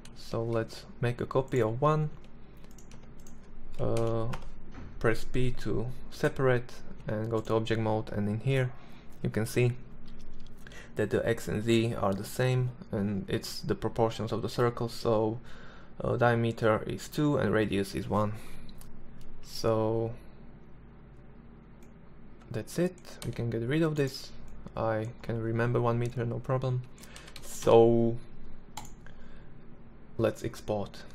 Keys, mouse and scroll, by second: 0.5 Escape, 0.9 Tab, 1.7 Tab, 2.7 ctrl+l, 3.1 p, 5.7 Tab, 6.1 right click, 20.7-22.8 right drag, 21.9 x, 23.2-23.6 right drag, 25.9 a, 26.1 a, 26.3 a.